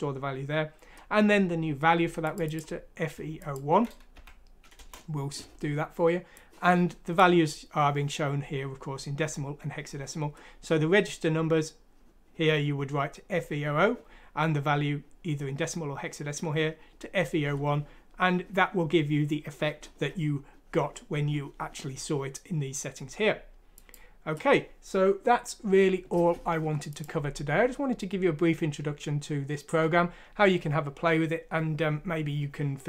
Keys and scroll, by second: 4.2 F6, 4.8 Return.